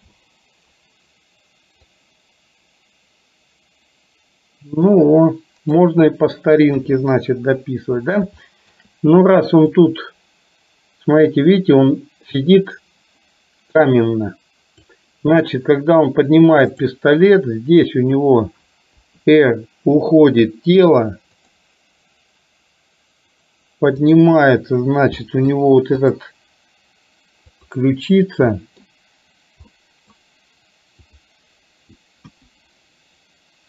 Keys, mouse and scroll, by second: 0.0 i, 2.0-5.9 drag, 6.9 KP_3, 8.5 shift+middle click, 9.8-15.0 drag, 16.8 click, 19.0 r, 24.3 click, 25.4 middle click, 26.0 click, 27.8 click, 28.5-28.9 middle drag, 29.8-30.3 middle drag, 31.3 click, 32.3 KP_1.